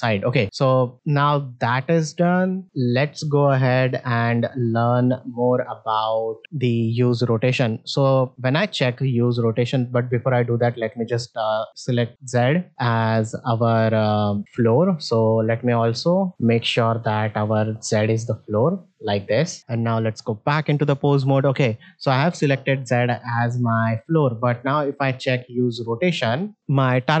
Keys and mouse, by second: 3.8 middle drag, 4.4 ctrl+Tab, 5.1 z, 6.4 ctrl+Tab, 10.6 click, 13.2 middle click, 16.0 ctrl+Tab, 16.4 middle click, 17.6 alt+r, 18.4 middle drag, 19.1 middle click, 19.5 shift+middle click, 19.8 ctrl+Tab, 20.9-21.2 middle drag.